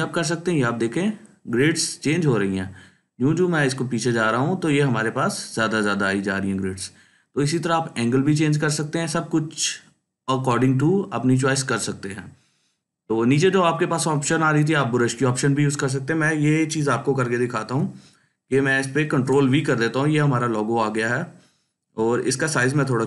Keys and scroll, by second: 19.0 ctrl+v, 22.9 ctrl+t.